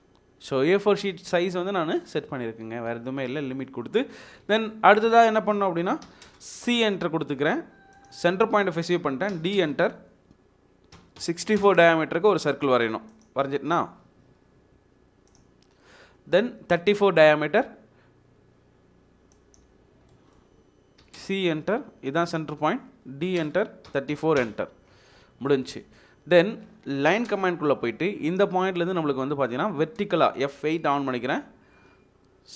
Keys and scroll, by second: 6.0 c, 6.2 space, 9.3 d, 9.6 space, 11.1 typing, 11.6 Return, 21.0 c, 21.1 space, 23.3-24.1 typing, 24.4 Return, 27.2 l, 27.3 space, 31.1 F8.